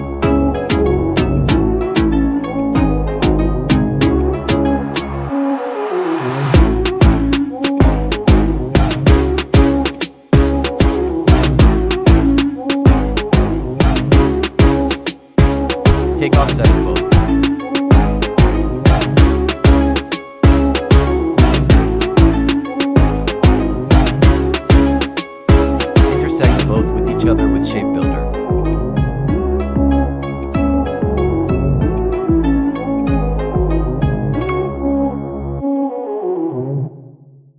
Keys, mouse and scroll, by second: 1.3-7.5 drag, 11.5-13.5 drag, 15.2 ctrl+a, 16.8 click, 25.0 ctrl+Num_Lock, 25.0 click, 25.1 ctrl+a, 26.2 click, 27.7 space, 28.5-34.5 drag, 34.5-35.9 scroll down 1.